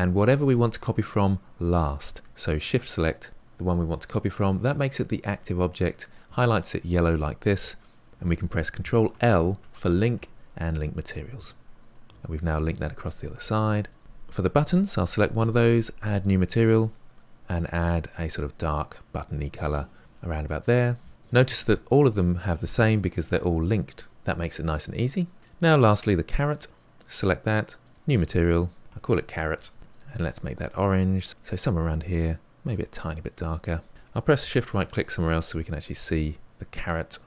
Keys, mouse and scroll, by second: 3.2 shift+click, 11.4 ctrl+l, 11.9-12.6 middle drag, 12.6-13.2 drag, 13.2-14.0 middle drag, 14.0 click, 16.2-19.1 drag, 21.1-26.4 middle drag, 26.4 click, 27.9-29.5 drag, 29.5 r, 31.8 click, 33.7-34.5 middle drag, 34.5-35.1 shift+right drag, 35.1-37.2 middle drag.